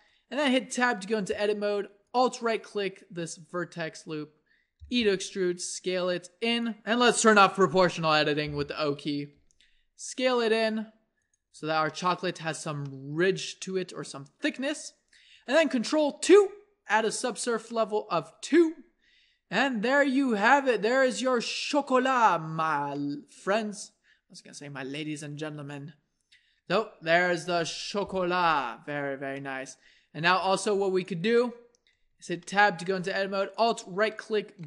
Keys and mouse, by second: 0.6 Tab, 4.8 e, 5.4 s, 8.4 o, 9.4 s, 11.6 Tab, 16.2 ctrl+2, 17.4 middle click, 23.0-25.6 drag, 27.5 KP_1, 30.4 s, 31.0 click, 32.1 Tab, 33.0 a.